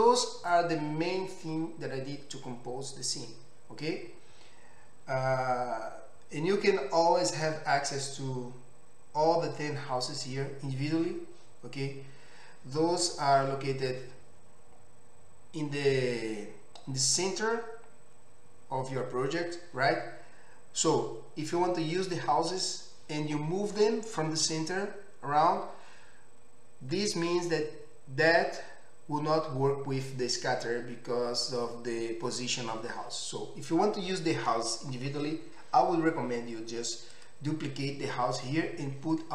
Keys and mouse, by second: 7.5-39.3 middle drag.